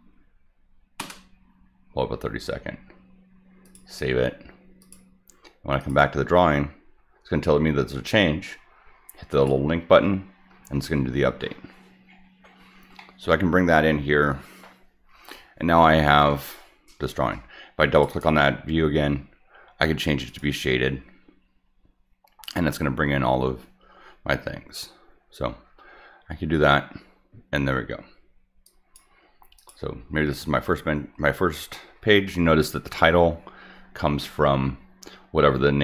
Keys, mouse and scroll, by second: 3.6 click, 4.8 click, 5.8 click, 9.3 click, 11.7 scroll down 4, 12.0 scroll up 2, 12.5 scroll down 2, 13.0 middle click, 13.6 middle click, 17.9 click, 18.1 click, 20.3 click, 28.6 click, 29.6 click, 31.7 middle click.